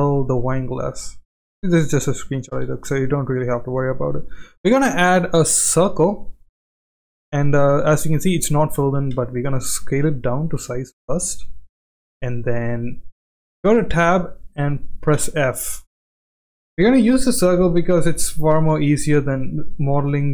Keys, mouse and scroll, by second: 0.6 s, 1.2 g, 2.5 shift+a, 6.8-7.7 middle drag, 8.1-8.5 shift+middle drag, 9.1 s, 13.7 Tab, 15.1 f, 17.0 KP_1, 18.4 shift+middle click, 19.8 shift+middle click.